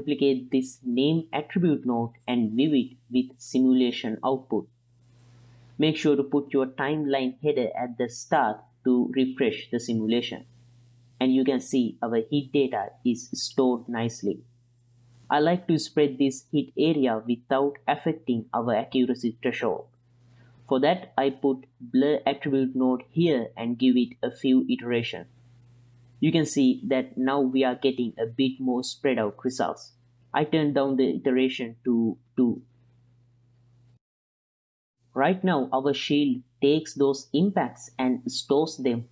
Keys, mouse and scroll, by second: 0.9 ctrl+shift+click, 2.0 ctrl+shift+click, 3.1 click, 3.9-4.4 middle drag, 5.4 click, 6.9-12.9 drag, 14.7 middle click, 15.3-16.3 middle drag, 16.6 click, 18.8-19.7 middle drag, 20.0-20.4 drag, 20.8 click, 21.2 drag, 21.4-23.6 drag, 24.4-24.8 drag, 25.0 click, 26.4-28.3 drag, 28.6-29.6 middle drag, 32.2-34.4 drag, 34.5-39.1 drag.